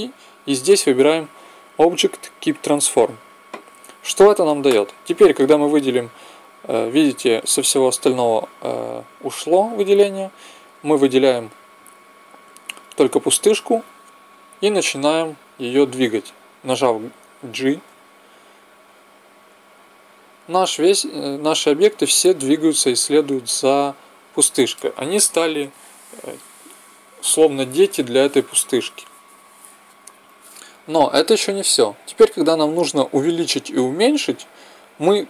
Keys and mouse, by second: 5.1-14.8 middle drag, 17.8 g, 22.8-24.7 middle drag.